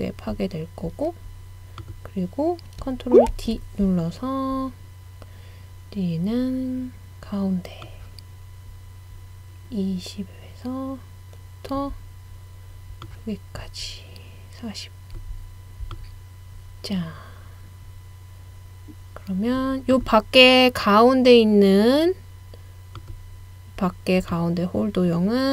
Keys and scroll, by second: 3.3 super+d.